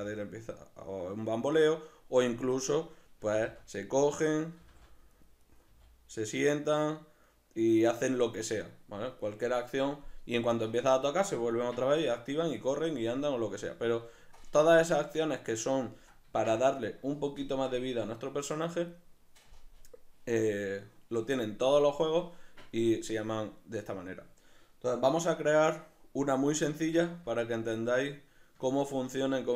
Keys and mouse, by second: 0.0 r, 1.4 right click, 2.6 right click, 3.4 g, 4.4 right click, 4.6 g, 5.4 right click, 5.7 g, 8.7 right click, 15.1-20.6 middle drag, 26.8 alt+q, 27.6 ctrl+middle click.